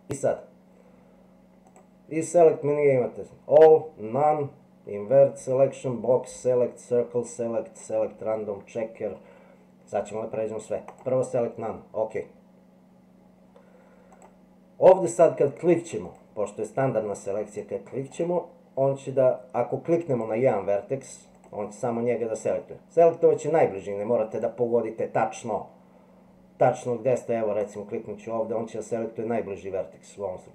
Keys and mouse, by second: 1.8-11.0 drag, 14.1 click, 16.1 click, 18.1 click, 20.2 click, 22.4 click, 24.3 click.